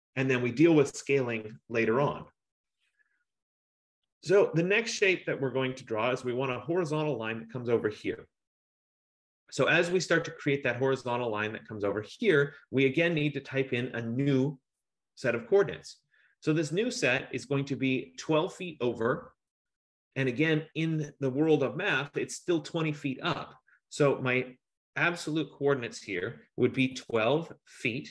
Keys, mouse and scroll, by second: 10.7 F15, 26.8-28.1 typing.